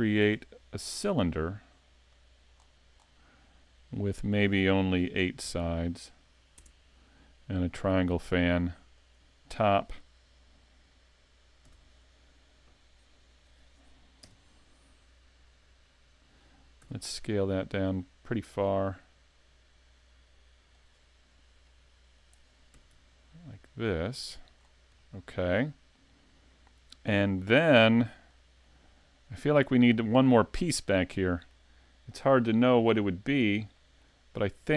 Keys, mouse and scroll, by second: 0.2 shift+a, 2.5-3.1 scroll down 9, 3.9 click, 6.2 click, 7.9 click, 11.7 s, 14.2 KP_Decimal, 14.9 scroll down 5, 15.7 scroll down 1, 15.8 middle click, 16.8 s, 20.8 click, 21.6 click, 22.7 s, 24.5 scroll down 5, 25.0 middle click, 28.3 scroll up 3, 28.6 middle click, 32.4-33.4 scroll up 1, 33.4-33.8 scroll down 2, 33.8 middle click, 34.5 scroll up 1.